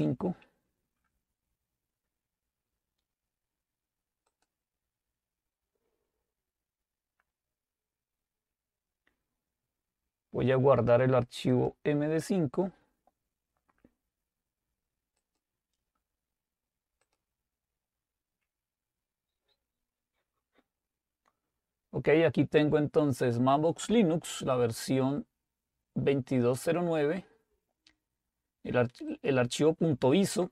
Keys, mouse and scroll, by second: 2.1-2.9 scroll down 2, 2.9-4.3 scroll up 2, 4.3 click, 11.6 click, 15.3 click, 17.4 click, 20.9-22.5 scroll down 2, 29.2 click.